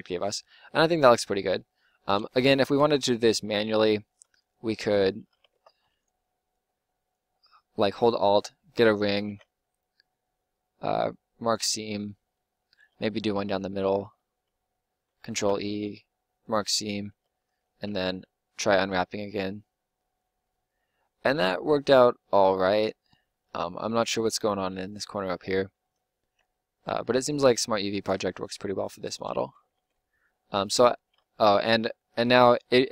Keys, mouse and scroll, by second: 2.3 Tab, 2.6 Tab, 5.5 ctrl+Tab, 9.2 ctrl+e, 15.3 ctrl+e, 16.9 a, 17.1 a, 17.9 u, 26.4 u, 29.4 Tab, 29.7 Tab, 31.1-32.7 middle drag.